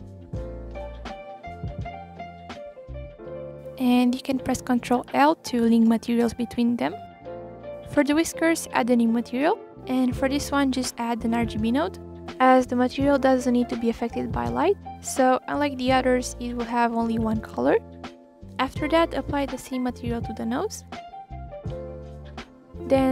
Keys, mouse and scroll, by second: 1.6 scroll up 2, 1.8-2.2 middle drag, 2.5-2.8 drag, 3.5 scroll down 1, 3.7-4.1 scroll up 3, 4.2-4.7 shift+drag, 4.7 scroll down 3, 4.8-5.5 middle drag, 5.5 scroll up 2, 5.7 shift+click, 7.3 ctrl+l, 7.5 click, 8.2-8.6 drag, 8.8 Delete, 10.5 shift+a, 12.3 click, 12.8 click, 15.3-16.3 scroll up 2, 16.3 click, 17.3 shift+click, 18.5 ctrl+l, 18.9 click, 19.2-19.7 scroll down 1, 19.7-20.3 scroll up 1, 20.3 click, 21.8 shift+click, 23.0 ctrl+l.